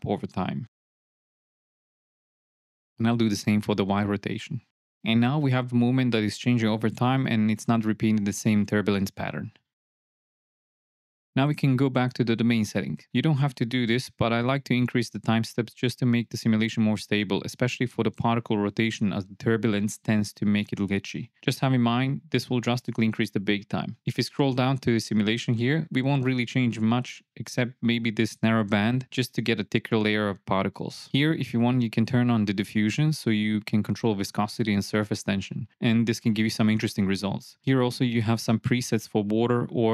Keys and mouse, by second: 0.3-0.6 drag, 2.6-4.6 drag, 4.5 KP_0, 5.4 shift+Left, 5.6 space, 11.3 n, 11.9 click, 15.4-17.7 drag, 18.8-20.3 drag, 22.2-23.5 drag, 27.5 shift+Left, 28.7-30.2 drag, 37.3 click, 37.6-39.3 drag.